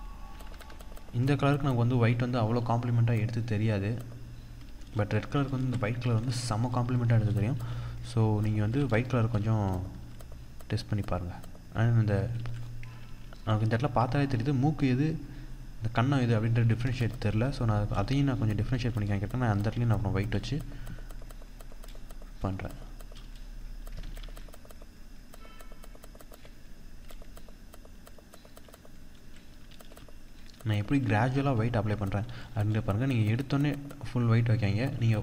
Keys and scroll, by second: 4.7 ctrl+-, 6.2 ctrl+=, 6.8 ctrl+=, 7.0 ctrl+space, 10.4 ctrl+=, 11.8 ctrl+-, 12.5 ctrl+z, 16.5 ctrl+=, 23.5 ctrl+z, 26.4 ctrl+z, 29.2 ctrl+-.